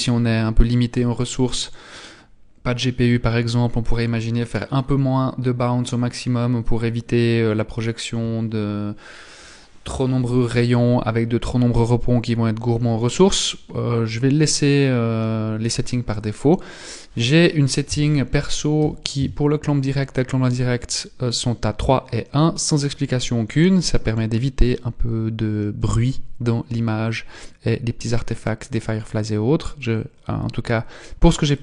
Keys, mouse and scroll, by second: 2.4-2.7 scroll down 1, 16.8 click, 26.8-28.3 scroll down 2, 31.4 click.